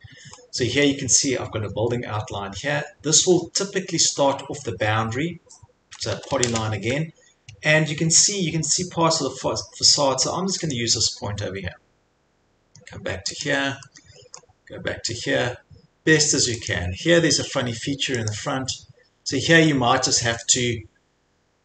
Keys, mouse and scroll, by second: 0.9 scroll, 2.5 scroll, 4.0 scroll, 5.9 middle click, 6.0 middle click, 6.1 typing, 10.7 click, 12.0 click, 13.4 click, 14.4 scroll, 15.9-16.4 scroll, 16.7 click, 18.3 click, 18.9 click, 19.0-19.7 scroll, 20.3-21.4 scroll.